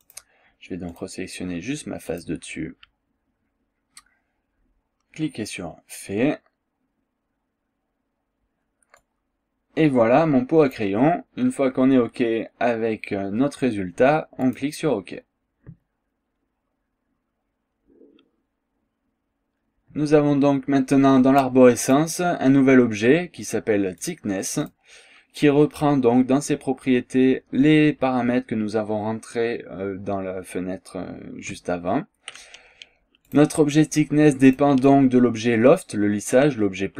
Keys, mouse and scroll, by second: 0.1 click, 0.9 click, 2.1 click, 9.0-11.0 drag, 14.5 click, 21.9 click, 24.0 click, 24.7 click, 33.3 click, 34.5 click.